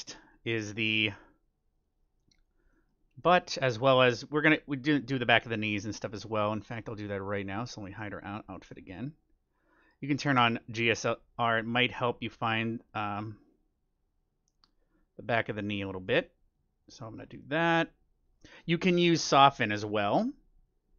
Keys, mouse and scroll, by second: 1.7-3.4 drag, 2.7-6.7 middle drag, 7.5-9.2 drag, 7.9-9.7 middle drag, 10.7-12.5 drag, 11.6-13.4 middle drag, 13.4-15.2 drag, 15.7-19.5 drag, 16.0-17.9 middle drag, 17.6-18.8 scroll up 1, 18.8 scroll up 1.